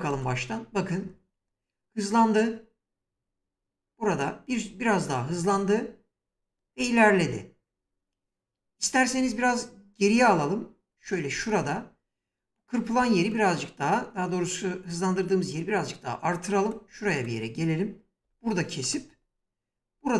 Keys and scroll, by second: 6.3 space, 8.9 ctrl+z, 17.9 s.